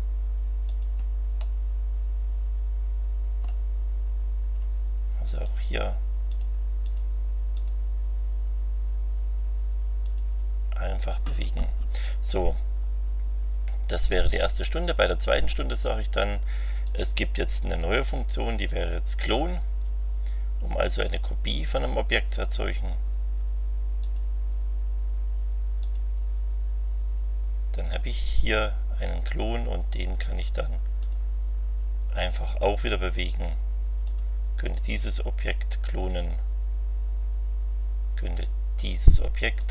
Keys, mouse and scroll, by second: 0.6 click, 1.3-3.6 middle drag, 5.4 click, 6.3 click, 6.8 click, 7.5 click, 10.0 click, 16.8 click, 24.0 click, 25.8 click, 30.2 click, 31.0 click, 32.2 click, 34.0 click, 35.8 click, 39.6 click.